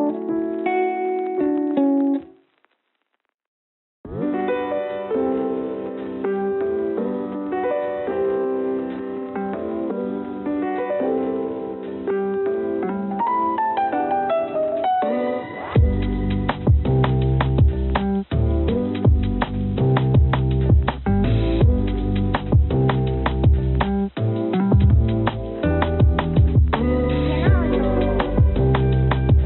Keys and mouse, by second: 0.0 g, 1.0 z, 2.1 g, 3.1 g, 8.2-9.3 drag, 9.6 click, 13.3 shift+a, 15.8 s, 17.5 s, 20.5 s, 25.9-29.4 drag.